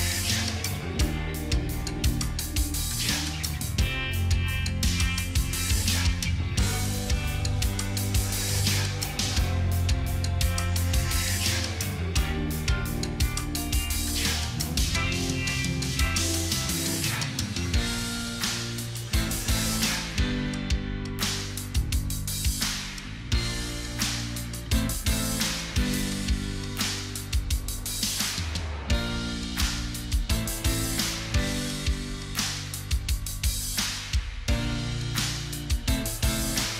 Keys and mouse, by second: 0.1 0, 0.4 0, 0.6 Return, 2.9 2, 3.1 Return, 12.4 ctrl+click, 14.9 double click, 16.7 Return, 19.0 ctrl+a, 27.5 ctrl+click.